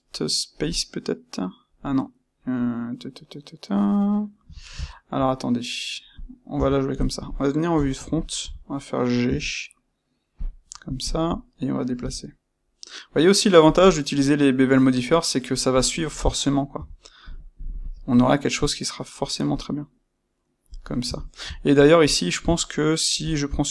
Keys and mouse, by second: 6.2 click, 6.5 Tab, 6.9 click, 7.6 KP_1, 8.2-10.3 ctrl+middle drag, 9.2 g, 10.3 click, 11.0 shift+click, 11.9 g, 13.7 click, 15.6 click, 16.7 g, 20.7 click, 21.1-22.3 shift+middle drag, 22.3 click, 23.1 click.